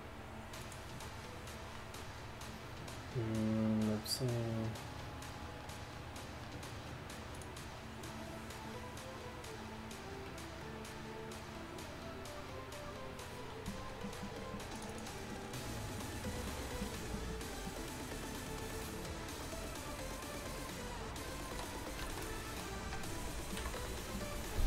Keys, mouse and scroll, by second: 21.5-21.9 middle drag, 23.6 KP_1, 23.8 KP_5.